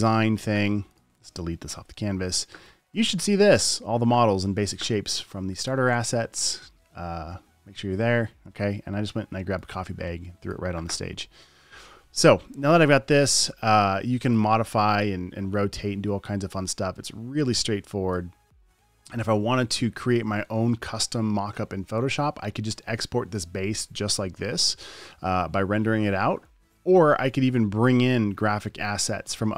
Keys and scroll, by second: 2.1 BackSpace.